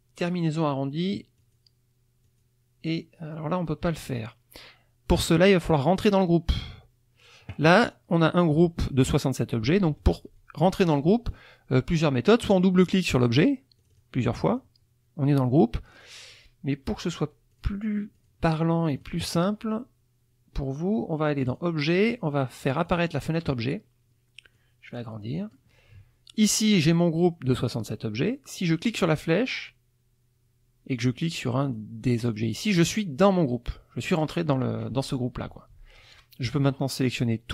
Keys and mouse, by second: 1.4 click, 2.2 click, 13.8 click, 14.5 click, 15.9 click, 17.5 click, 18.1 click, 18.5 click, 19.0 click, 21.5 click, 22.8 click, 24.5-25.7 drag, 29.0 click, 30.9 click, 31.6 click, 32.2 click, 33.2 click, 36.0 click, 36.6-37.5 drag.